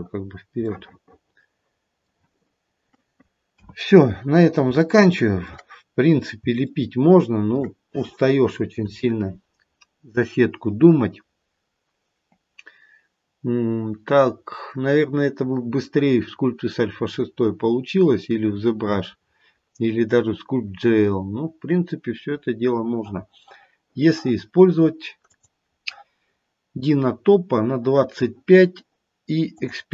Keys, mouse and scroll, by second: 0.5 middle click, 0.7 middle click, 2.4-3.5 scroll down 1, 3.5-4.1 scroll down 1, 3.5 KP_1, 4.7 shift+middle click, 5.6-6.3 scroll down 1, 6.5 shift+middle click, 25.2 click, 29.5 click.